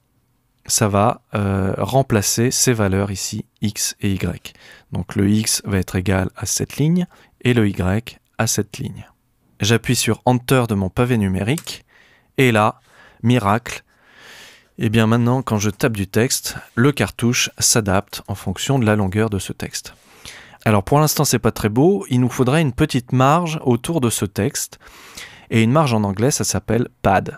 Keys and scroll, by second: 11.6 Return, 15.2-16.4 typing, 17.8 BackSpace.